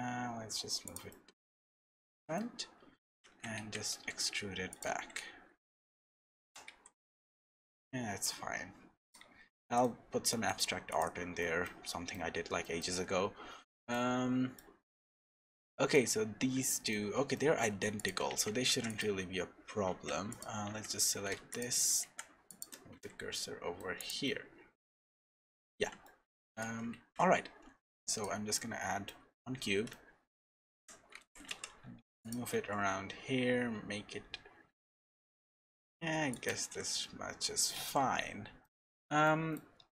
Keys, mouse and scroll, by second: 1.1 middle click, 2.6-3.2 scroll up 1, 3.2 Tab, 3.2 scroll up 2, 3.6 a, 3.9 e, 4.9 Tab, 5.2-6.3 scroll down 4, 5.6 middle click, 6.4 g, 9.2 Tab, 9.5 middle click, 9.8-10.3 scroll down 4, 10.1 Tab, 10.3 middle click, 10.9 click, 11.4 shift+middle click, 11.8 middle click, 12.6 shift+middle click, 13.5 scroll down 1, 14.0 shift+middle click, 17.0 shift+middle click, 17.3 middle click, 18.0 click, 18.3 Tab, 18.6 3, 18.9 click, 19.9 Tab, 20.3 click, 20.7 Tab, 21.3 3, 21.5 click, 22.0 shift+s, 22.9 Tab, 23.3 middle click, 24.0 click, 24.2 middle click, 25.4 middle click, 26.0 shift+middle click, 26.9 shift+a, 28.5 middle click, 29.9 shift+middle click, 30.7 g, 32.5 s, 38.6 middle click.